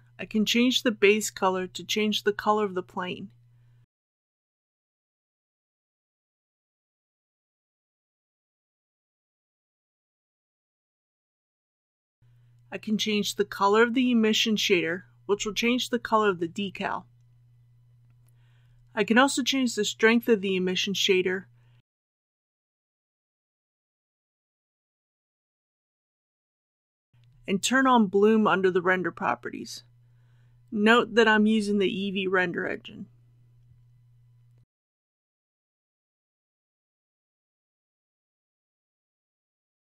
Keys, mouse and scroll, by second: 5.5 shift+middle click, 6.9-21.9 drag, 22.1 KP_1, 22.3 KP_5, 29.7 click, 35.7-37.9 middle drag.